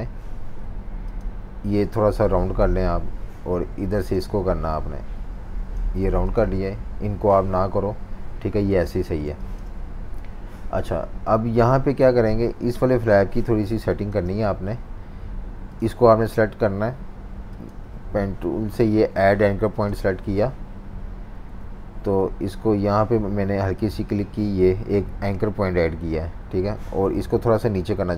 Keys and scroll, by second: 6.1 v, 9.1 v, 9.2 space, 13.7 v, 13.8 space, 21.5 F19.